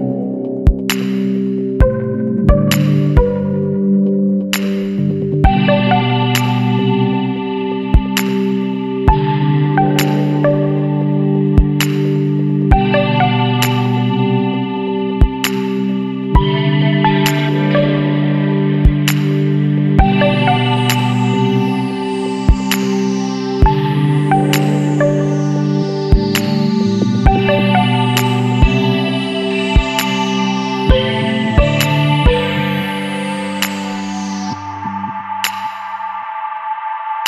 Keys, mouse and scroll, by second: 3.2 click, 3.9 click, 5.0 ctrl+v, 6.5 click, 8.1 click, 9.5 click, 11.9 click, 12.9 KP_3, 13.0 KP_0, 14.7 click, 16.9 KP_1, 17.2 KP_3, 17.4 KP_Decimal, 17.6 KP_5, 19.7 click, 21.5 click, 22.6 click, 23.5 ctrl+v, 24.4 scroll down 2, 25.5 click, 26.1 click, 27.3 click, 28.1 click, 29.7 click, 30.9 KP_3, 31.1 KP_6, 32.9 click, 33.9 KP_1, 34.1 KP_4, 35.9 click.